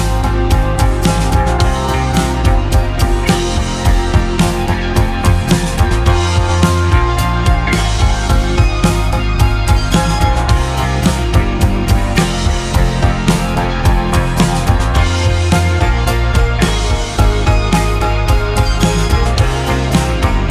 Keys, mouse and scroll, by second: 1.0 click, 1.9 click, 2.9 s, 6.2-10.1 drag, 10.1 ctrl+z, 10.5 ctrl+z, 11.2 ctrl+shift+z, 12.3 click, 13.1 click, 15.2 s.